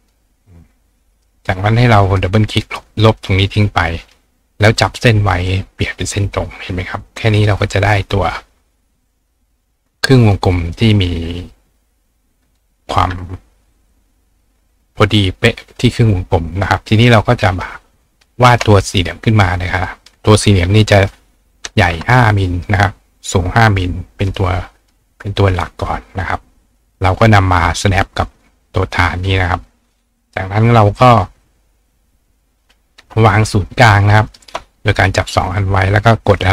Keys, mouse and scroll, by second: 2.1 click, 2.3 click, 3.3 click, 5.7 click, 7.4 click, 8.1 click, 9.9 click, 11.0-17.0 drag, 17.7 ctrl+click, 19.6 click, 23.7 click, 24.3 click, 24.8 click, 26.4-27.8 drag, 34.3 shift+click, 35.5 click.